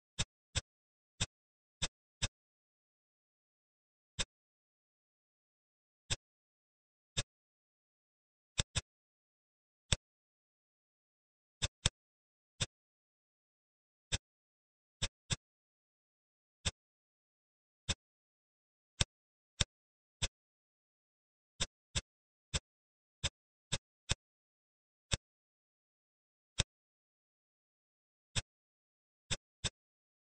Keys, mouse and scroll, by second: 0.5 shift+click, 1.1 shift+click, 1.7 shift+click, 2.1 middle click, 2.8 e, 4.8 ctrl+b, 6.4 Tab, 7.1-7.8 middle drag, 7.8-8.4 scroll down 4, 8.4 drag, 8.7-9.8 middle drag, 9.8 click, 10.1 Tab, 11.2 Tab, 11.5 click, 11.7-12.2 middle drag, 12.2 scroll down 3, 12.5-13.5 middle drag, 13.5-14.0 scroll down 5, 14.0 click, 14.6 h, 14.9 drag, 15.1-16.0 middle drag, 16.0 shift+a, 17.1 s, 18.1-18.8 scroll down 5, 18.8 click, 19.5-20.1 drag, 20.1-21.0 middle drag, 21.0 shift+a, 22.4 middle click, 23.1-23.7 drag, 24.0-24.9 middle drag, 24.9 click, 26.4 click, 28.0 scroll down 1, 28.3-28.8 middle drag, 28.8-29.2 scroll up 1, 29.2 click, 29.5-30.3 middle drag.